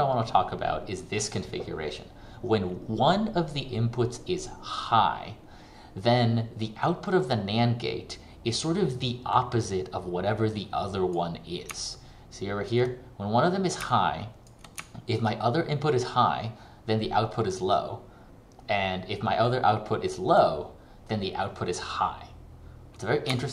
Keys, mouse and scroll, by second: 9.4 click, 11.8 ctrl+click, 15.0 ctrl+click, 19.6 click.